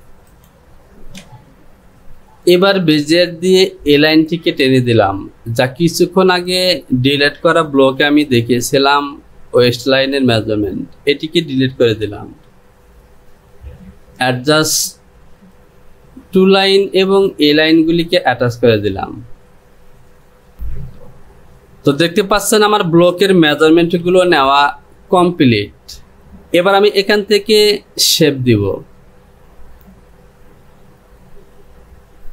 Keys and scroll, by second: 8.0 Delete, 20.5 Delete, 24.2 Delete, 25.4 Delete.